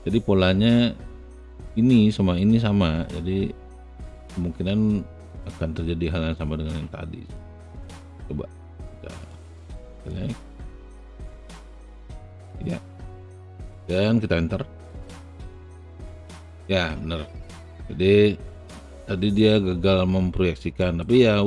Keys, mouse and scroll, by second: 8.3 shift+click, 9.4 shift+click, 10.1 shift+click, 12.6 alt+shift+right click, 13.0 alt+shift+middle click, 13.8-15.6 alt+shift+right drag, 18.6-20.1 alt+drag, 21.2 alt+middle click.